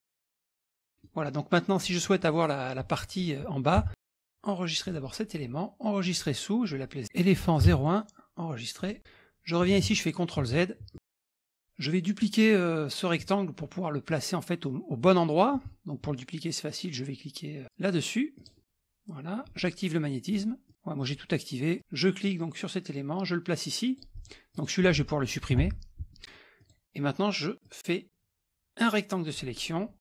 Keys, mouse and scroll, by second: 0.5 middle click, 0.5-1.0 scroll down 2, 0.8 click, 1.6 middle click, 1.6 scroll down 1, 3.8 KP_Subtract, 4.0 scroll down 1, 4.0-4.4 scroll down 1, 4.9 click, 6.1 click, 7.7 KP_0, 8.8 click, 9.8 ctrl+z, 10.5 ctrl+z, 10.9 ctrl+scroll down 4, 11.0 ctrl+middle click, 11.2 click, 11.4 middle click, 18.4-18.9 drag, 20.3 click, 22.2-25.1 drag, 25.6 Delete, 26.6-27.2 drag, 27.6-29.5 drag.